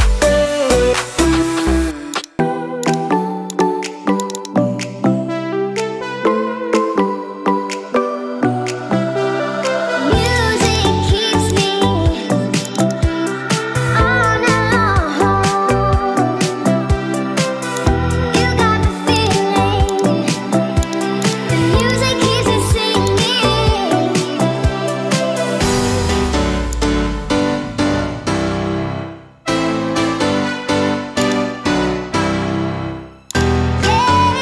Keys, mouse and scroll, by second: 17.0 click.